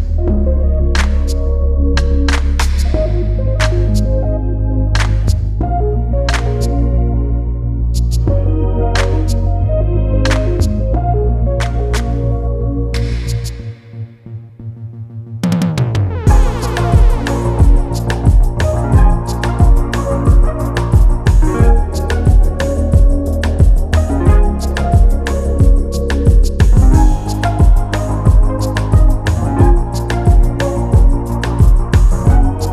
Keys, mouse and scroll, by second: 0.1 click, 0.7 Tab, 1.0 e, 1.3 a, 1.4 e, 2.3 Tab, 2.5 s, 3.4 scroll up 3, 3.6 scroll down 1, 3.7 Tab, 4.1 Tab, 4.2 click, 4.4 scroll down 1, 4.6-5.1 scroll up 2, 5.1 click, 6.0 scroll up 2, 6.2-6.5 scroll down 1, 6.5 click, 7.1 shift+a, 7.6-8.0 scroll down 2, 8.0 s, 9.6 scroll up 1, 9.8-10.2 scroll down 4, 10.2 g, 11.2-11.5 scroll up 1, 11.5 s, 13.3 scroll up 1, 13.5 s, 15.2 click, 15.4-15.7 scroll down 6, 15.7 scroll up 1, 16.1 scroll down 4, 16.4 s, 17.9 g, 19.0-19.4 scroll up 6, 19.5 s, 20.5 g, 21.6 s, 23.9 s, 24.9 click, 25.1-25.6 scroll up 2, 25.6 click, 25.9-26.3 scroll up 1, 26.3 g, 27.4 click, 28.0 shift+d, 29.2 shift+d, 31.5 click, 31.8 g.